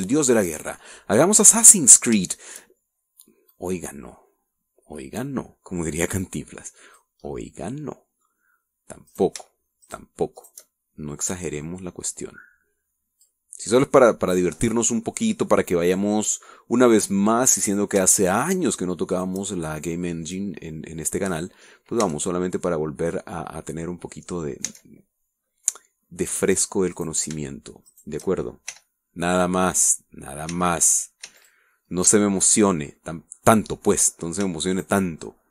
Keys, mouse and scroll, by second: 0.2 shift+right click, 0.5-2.0 shift+middle drag, 2.6 middle click, 3.3 shift+middle click, 4.6-8.2 drag, 8.3-9.5 middle drag, 10.1 shift+right click, 10.9 shift+right click, 11.5 shift+right click, 12.4-14.5 drag, 14.5-18.4 middle drag, 18.8 right click, 19.5 shift+right click, 20.2 shift+right click, 21.4-22.6 drag, 22.7 middle click, 23.1 Tab, 23.5-24.4 middle drag, 24.4 scroll down 1, 24.9-25.5 middle drag, 25.5-26.3 scroll up 1, 25.7 Tab, 26.3 middle click, 26.5-26.9 scroll up 1, 26.9-28.0 middle drag, 28.0 right click, 28.9 shift+right click, 29.8 w, 30.9 click, 31.6 w, 31.9 click, 32.2 middle click, 32.3 w, 32.5 click, 32.7 middle click, 33.0-34.1 middle drag, 34.5 middle click.